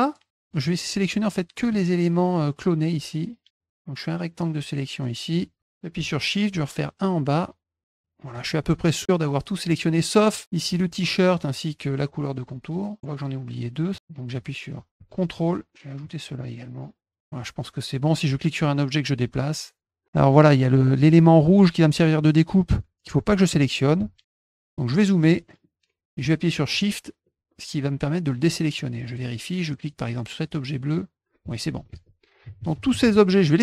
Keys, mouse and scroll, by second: 0.6 middle click, 1.6 click, 2.1-5.3 drag, 6.5-8.3 shift+drag, 15.3 ctrl+click, 16.0 ctrl+click, 16.6-17.2 scroll down 4, 18.2-20.0 drag, 24.8 middle click, 24.8-25.6 scroll up 8, 25.0 middle click, 25.2 middle click, 25.5 middle click, 26.7 shift+click, 28.3 middle click, 30.5-31.6 drag.